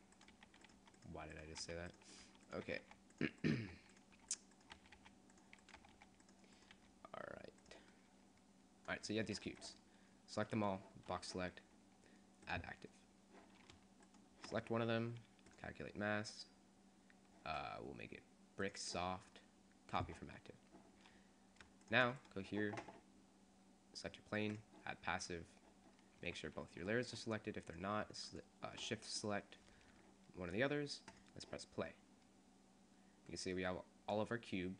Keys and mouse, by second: 0.4 r, 0.8 g, 1.8-4.8 typing, 5.8 r, 6.2-7.4 right drag, 6.8 r, 9.4 a, 9.6 b, 14.3-15.7 shift+middle drag, 21.9 click, 23.9 click, 24.7-26.5 drag, 26.5 a, 27.9-29.9 drag, 32.8 click, 33.4 click.